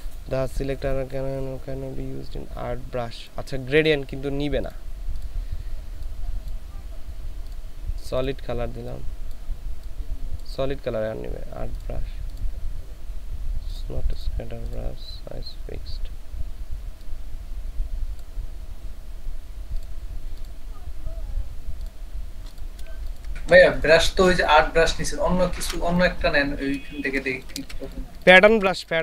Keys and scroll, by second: 23.1 ctrl+space, 23.6 ctrl+space, 25.6 ctrl+z, 26.9 ctrl+space, 28.6 ctrl+space.